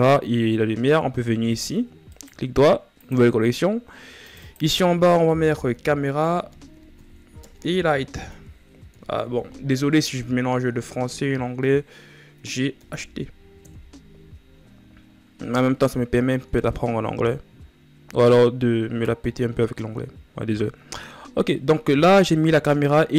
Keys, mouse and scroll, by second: 1.7-3.9 right drag, 4.0-15.2 drag, 15.2-15.9 shift+scroll down 3.